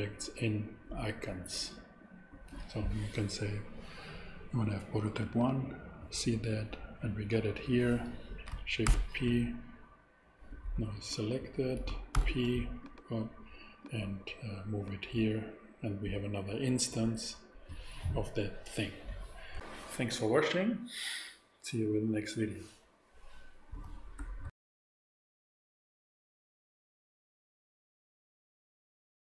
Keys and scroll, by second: 8.8 ctrl+alt+p, 12.1 ctrl+alt+super+p.